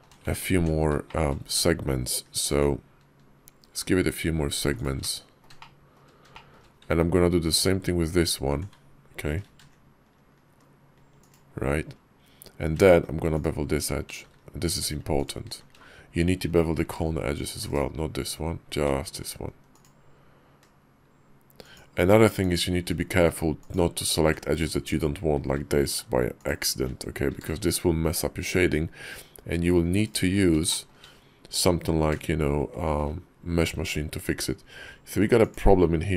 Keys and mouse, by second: 0.3 ctrl+z, 0.5 middle click, 0.9 shift+middle click, 2.3 ctrl+b, 4.9 click, 5.4 shift+click, 6.2 shift+click, 6.3 shift+middle click, 7.3 alt+click, 9.3 ctrl+b, 16.6 ctrl+b, 22.2 alt+click, 27.1 ctrl+b, 30.5 shift+middle click, 31.8 ctrl+b.